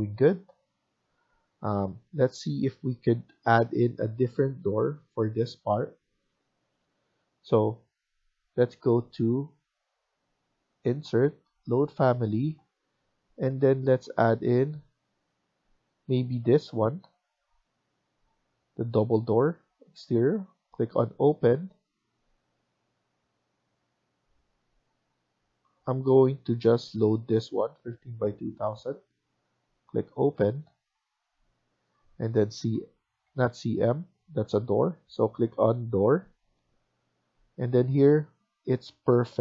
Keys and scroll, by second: 33.1 Escape, 33.1 typing, 33.4 Escape.